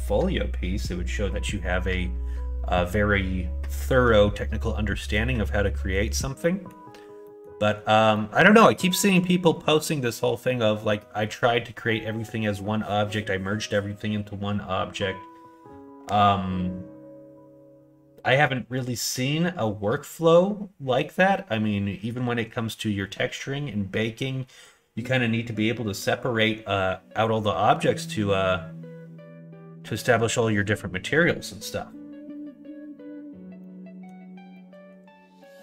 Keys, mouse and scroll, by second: 6.4 middle click, 7.2 middle click, 8.1-9.1 middle drag, 33.6 middle click, 34.5 middle click, 35.4 middle click.